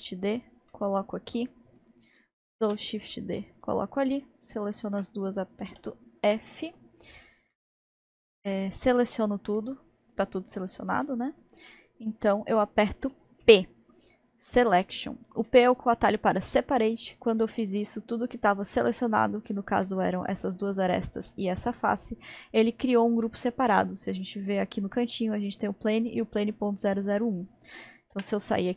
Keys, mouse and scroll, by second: 0.7-2.8 middle drag, 2.8 shift+d, 4.8 shift+click, 5.7 f, 6.5-13.4 middle drag, 13.4 p, 15.5-18.5 middle drag, 19.9-24.0 middle drag, 28.2 Tab.